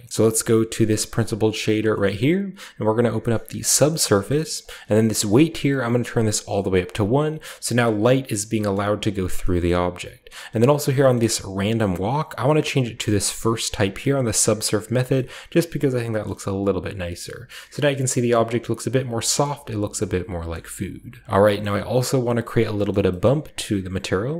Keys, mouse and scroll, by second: 0.1-3.6 scroll up 1, 0.2-1.1 middle drag, 1.0-4.0 drag, 2.0-3.6 middle drag, 4.0-4.8 middle drag, 4.5-7.5 drag, 7.1-8.4 scroll down 1, 7.5-9.3 middle drag, 8.4-9.3 scroll down 1, 9.3-10.8 scroll down 1, 9.6-10.9 middle drag, 10.8 scroll down 1, 11.1-11.6 middle drag, 11.1-13.6 scroll up 1, 11.5-13.6 drag, 14.4-15.5 drag, 15.5-16.0 shift+middle drag, 16.2 middle click, 16.8-17.2 shift+scroll down 2, 17.2-17.5 shift+middle drag, 17.7-18.0 middle drag, 18.3 middle drag, 19.4 middle click, 20.5-21.1 middle drag, 20.8-22.7 scroll down 1, 21.1 click, 21.2 middle click, 21.5-22.7 middle drag, 22.8 middle click.